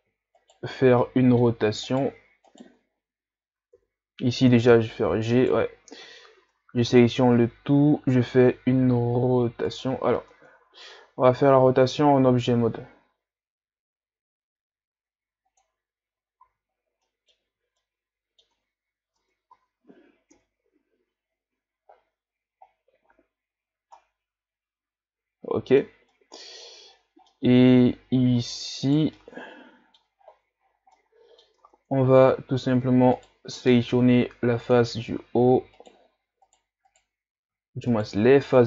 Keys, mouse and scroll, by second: 0.4 shift+right click, 1.0-1.9 middle drag, 1.9 shift+right click, 2.5 shift+right click, 3.8 KP_3, 4.7 g, 6.5 Tab, 7.4 a, 7.7 a, 8.8 r, 10.2 Tab, 12.2 r, 16.5 z, 16.7 scroll down 1, 17.0 middle click, 17.5 z, 17.8 middle click, 18.6 Tab, 19.2 Tab, 19.5 a, 20.3 KP_1, 22.7-23.8 scroll up 1, 23.8 scroll up 1, 24.0-26.9 middle drag, 26.9-27.3 scroll up 4, 27.3-28.9 middle drag, 28.9 right click, 29.2-30.2 middle drag, 30.2-31.0 scroll up 5, 31.0 middle click, 31.6 Tab, 33.2 right click, 33.8 ctrl+Tab, 35.8 alt+right click, 36.5 right click, 36.9 shift+right click, 37.9 shift+right click.